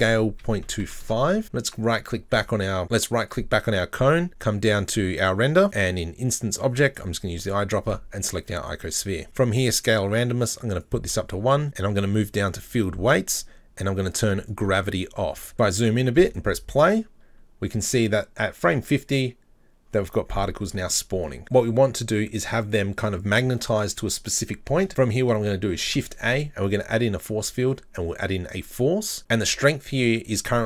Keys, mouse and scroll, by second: 0.0 s, 1.7 right click, 3.3 right click, 4.3-5.6 scroll down 4, 5.6-6.3 scroll down 12, 6.9 click, 10.2-11.6 drag, 12.7-13.1 drag, 13.0-14.1 scroll down 7, 14.1-15.5 drag, 16.2 click, 24.7 scroll down 4, 24.9 middle click, 25.8 shift+a, 29.2 middle click.